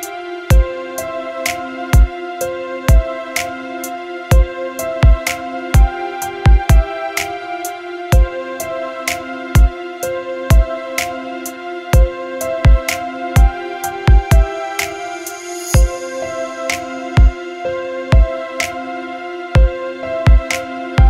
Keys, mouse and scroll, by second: 18.5 click.